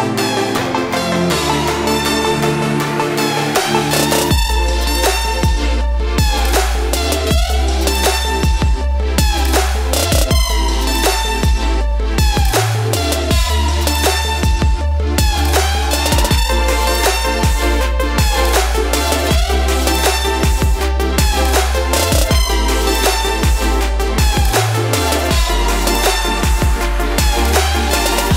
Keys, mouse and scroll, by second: 0.8 space, 0.9 click, 1.2 space, 3.0-4.8 drag, 9.4 click, 13.6 typing, 15.0 click, 17.6 2, 18.4 click, 18.7 2, 19.3 click, 21.0 click, 23.7 ctrl+space, 23.7 ctrl+click, 24.0 ctrl+space, 24.6 ctrl+space, 24.9 click, 25.2 space, 27.4-28.3 drag.